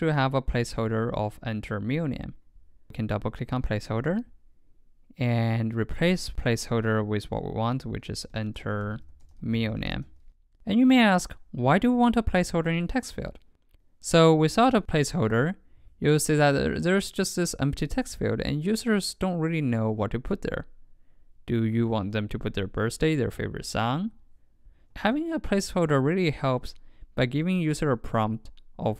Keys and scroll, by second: 14.7 super+x, 25.0 super+v, 25.7 super+s.